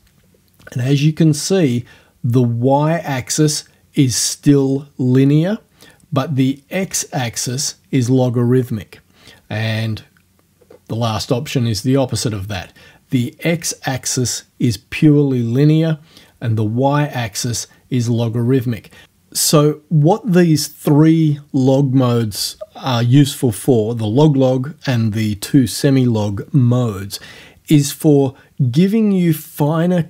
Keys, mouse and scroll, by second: 10.6 scroll down 1.